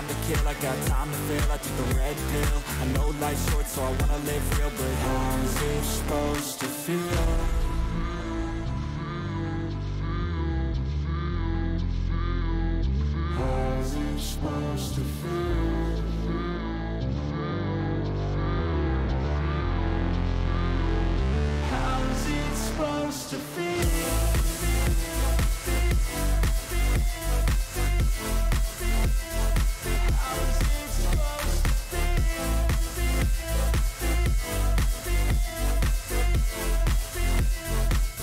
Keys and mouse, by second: 0.1 shift+click, 0.4 shift+click, 1.1 click, 4.4-6.0 drag, 7.2 click, 9.0 click, 9.9 alt+click, 10.4 alt+shift+click, 11.9 alt+shift+click, 12.6 alt+shift+click, 12.9 alt+shift+click, 13.8 alt+shift+click, 14.5 click, 16.4 alt+shift+click, 17.2 alt+shift+click, 18.5 alt+shift+click, 18.9 alt+shift+click, 20.2 alt+shift+click, 21.2 click, 22.9 click, 23.7 click, 24.4 click, 25.1 alt+shift+click, 26.3 alt+shift+click, 27.4 alt+shift+click, 28.6 alt+shift+click, 29.2 click, 29.9 alt+shift+click, 30.4 alt+shift+click, 31.8 alt+shift+click, 32.3 alt+shift+click, 33.6 alt+shift+click, 34.3 alt+shift+click, 35.8 alt+shift+click, 36.5 click, 37.2 shift+click.